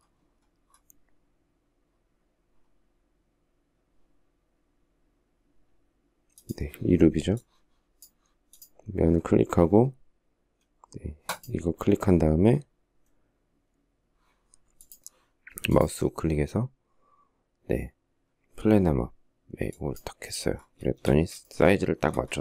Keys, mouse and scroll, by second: 21.2 shift+middle click.